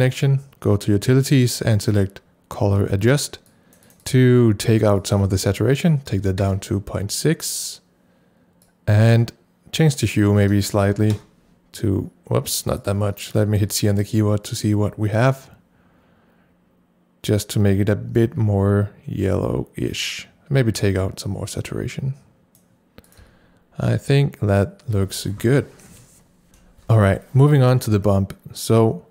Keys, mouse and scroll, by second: 3.1 click, 3.1 right click, 3.8 double click, 4.0 click, 5.0 click, 6.1 KP_Decimal, 6.2 KP_6, 6.4 KP_Enter, 8.6 click, 10.0 click, 10.8 KP_Decimal, 10.9 KP_1, 11.1 KP_Enter, 12.8 click, 13.3 click, 13.6 c, 15.3-26.5 drag, 21.3-22.8 drag, 23.2 c.